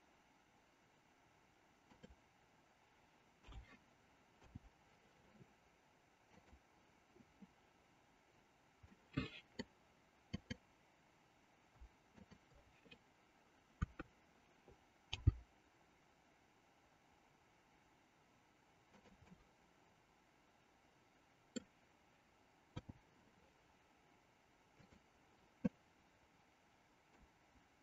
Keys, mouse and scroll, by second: 3.4 a, 4.4 i, 6.4 click, 8.9 middle click, 12.2-13.6 shift+drag, 13.8 KP_3, 15.2 g, 19.6-21.7 middle drag, 24.9 click, 25.8-27.3 middle drag.